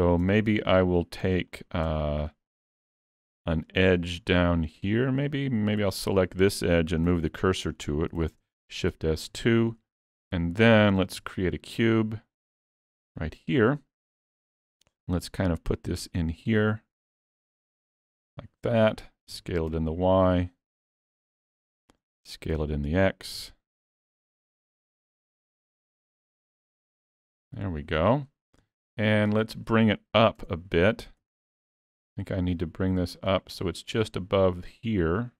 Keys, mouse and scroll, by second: 0.3 Tab, 1.3 Tab, 1.5 click, 1.9 Tab, 2.6 middle click, 3.4 middle click, 5.9 2, 6.0 click, 6.5 scroll up 1, 6.6 middle click, 7.1 shift+s, 7.7 middle click, 8.3 alt+a, 8.4 scroll up 1, 8.4 Tab, 8.7 middle click, 9.5 shift+middle click, 10.2 middle click, 11.2 shift+a, 13.9 middle click, 14.5 click, 18.2 middle click, 19.5 s, 21.4 middle click, 22.7 s, 27.5 middle click, 28.8 shift+middle click, 29.3 middle click, 30.4 Tab, 31.2 3, 31.5 click, 31.9 middle click, 33.2 click.